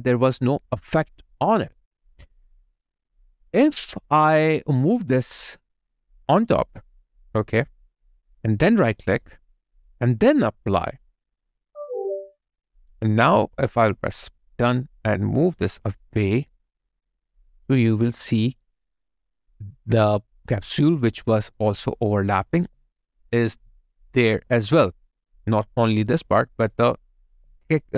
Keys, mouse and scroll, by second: 8.9 right click, 18.2 alt+right click, 18.6 alt+click, 22.6 alt+right click, 23.3 alt+click, 24.2 alt+click, 27.2 alt+click, 27.4 alt+right click.